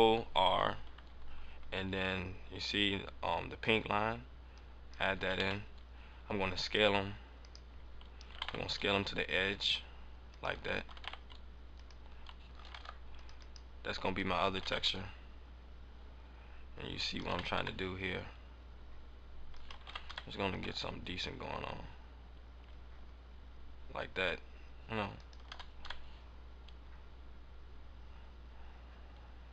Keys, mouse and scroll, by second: 4.8 click, 5.2 s, 7.4 right click, 7.6-8.3 scroll down 3, 8.3 s, 10.3 click, 10.8 s, 11.8 click, 12.6 ctrl+Tab, 13.3 right click, 13.8 right click, 14.4 s, 17.1 click, 17.2 s, 19.5 click, 19.7 click, 21.2 g, 25.2 click, 25.4 s.